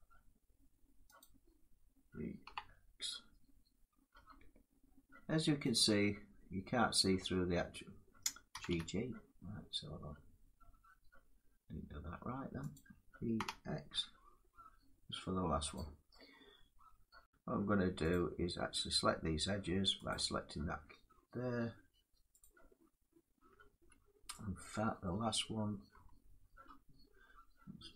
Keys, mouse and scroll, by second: 2.1 e, 3.8 x, 5.4-10.5 drag, 8.2 g, 8.4 g, 13.0 click, 13.1-13.6 typing, 15.4 click, 17.1 click, 17.1 scroll, 17.1 7, 17.8 click, 19.8 click, 22.6 click, 24.8 middle click, 25.6 Caps_Lock, 26.9 middle click.